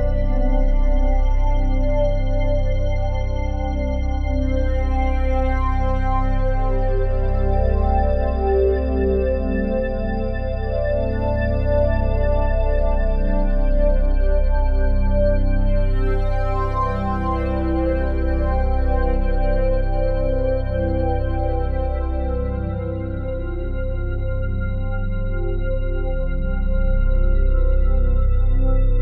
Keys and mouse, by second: 0.6 alt+shift+click, 1.5-3.8 ctrl+alt+drag, 6.8 click, 8.0 click, 8.9 g, 10.0 click, 11.0 ctrl+alt+click, 11.6 ctrl+alt+click, 12.2 click, 13.0 shift+click, 13.4 shift+click, 13.8 shift+click, 15.0 g, 15.8 click, 16.3 ctrl+alt+click, 16.6 ctrl+alt+click, 17.2 ctrl+alt+click, 17.7 a, 18.5 Delete, 19.3 click, 20.3 1, 21.6 click, 22.0 click, 23.0 click, 23.4 click, 24.4 Delete, 25.2 ctrl+alt+click, 25.5 ctrl+alt+click, 26.0 alt+shift+click, 26.6 ctrl+s, 27.6 ctrl+alt+click, 28.6 click.